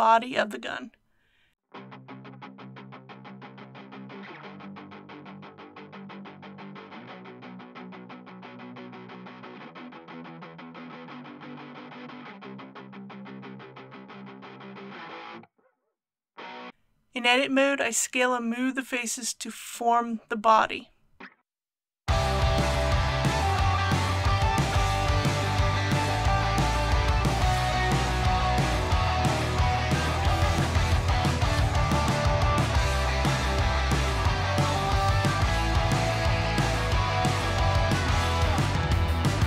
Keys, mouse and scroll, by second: 1.2 click, 2.2-3.1 typing, 5.3 click, 7.2 shift+a, 9.3 click, 10.3 s, 14.0 g, 14.7 shift+y, 16.7 click, 18.0 scroll up 1, 18.6 scroll down 1, 18.6-19.2 scroll up 1, 20.2 3, 21.0 middle click, 21.6 middle click, 22.1 click, 23.1 KP_1, 27.0 g, 28.3 z, 30.1 click, 30.2 g, 30.3 x, 31.1 click, 31.7 e, 33.2 click, 33.3 typing, 35.4-36.4 typing, 35.7 click, 37.2 click, 37.7 typing, 38.7 click, 39.3 click.